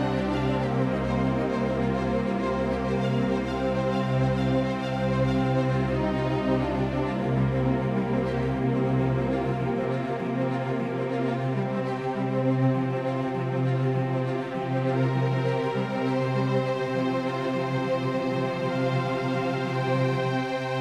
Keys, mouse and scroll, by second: 2.4 f, 3.9-7.8 middle drag, 7.8 ctrl+z, 8.7 ctrl+z, 9.7-11.7 middle drag, 11.7 KP_5, 12.4 KP_1, 13.5 KP_3, 14.4 KP_5, 19.0 c.